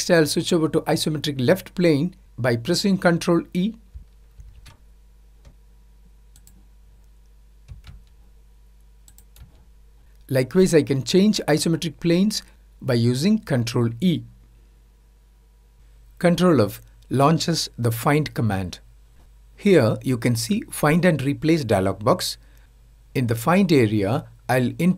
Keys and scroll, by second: 16.6 ctrl+f.